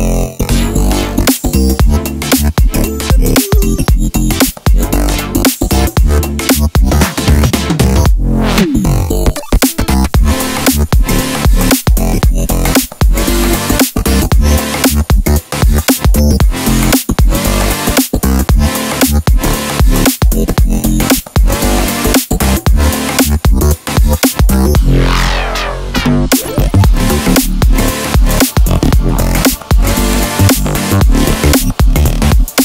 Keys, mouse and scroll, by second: 1.7 click, 2.5 o, 3.4 KP_Enter, 4.1 ctrl+s, 4.7 a, 6.9 click, 7.4 g, 8.2 click, 8.7 alt+h, 9.2 click, 9.5 click, 9.9 l, 10.3 alt+click, 10.7 f, 11.3 ctrl+s, 12.8-13.2 scroll up 2, 13.2 middle click, 13.8 Tab, 14.5 scroll down 1, 14.7 middle click, 15.8 s, 17.3 shift+middle click, 17.8 s, 18.7 click, 19.4 g, 20.2 click, 20.3 middle click, 21.0 3, 21.2 click, 21.3 shift+s, 23.6-25.7 drag, 24.2 KP_Enter, 24.5 Tab, 25.8 s, 26.5 click, 26.6 r, 27.1 KP_Enter, 27.5 scroll up 1, 27.7 s, 28.5 click, 29.1 3, 29.2 click, 29.5 i, 30.0 click, 30.6 click, 30.7 scroll down 2, 30.9-32.6 middle drag, 32.0 i.